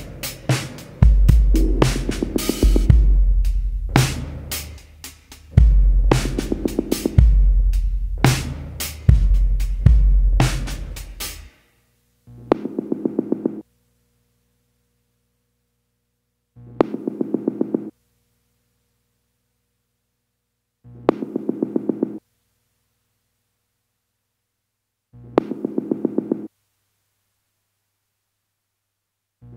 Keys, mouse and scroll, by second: 7.6-9.1 drag, 9.5 scroll down 2, 10.4 shift+click, 12.2 click, 13.5 click, 15.4 ctrl+scroll up 2, 16.1-16.7 ctrl+scroll down 4, 17.4-19.0 ctrl+drag, 20.0-22.0 drag, 27.9 click, 29.4 click.